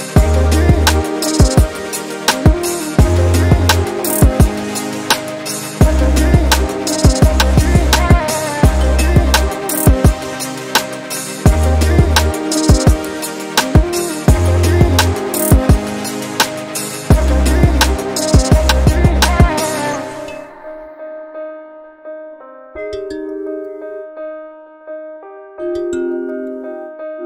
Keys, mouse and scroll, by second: 0.6 2, 1.4 alt+click, 2.0 g, 4.3 Tab, 4.9-5.3 scroll down 6, 5.3 scroll up 6, 5.5 Tab, 6.1 g, 12.8 alt+click, 13.8 g, 16.3 Tab, 16.5-17.3 scroll down 6, 17.3-18.6 middle drag, 18.6 scroll down 6, 18.9 middle click, 19.3-19.7 scroll up 5, 19.7-20.7 middle drag, 20.7 click, 21.0-23.7 middle drag, 23.7 s.